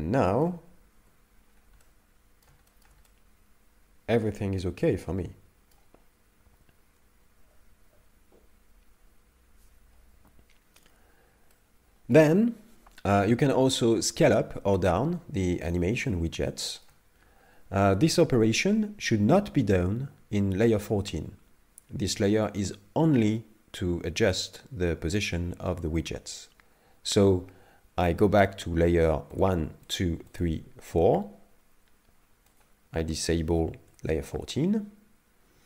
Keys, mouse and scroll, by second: 1.0 KP_5, 1.3-1.8 scroll down 3, 1.8 middle click, 2.7 shift+middle click, 3.0 middle click, 4.6 shift+middle click, 5.0 middle click, 11.5 middle click, 15.4-16.1 scroll up 2, 16.1 shift+middle click, 29.4 shift+click, 29.9 shift+click, 30.3 shift+click, 30.9 shift+click, 32.5 shift+click.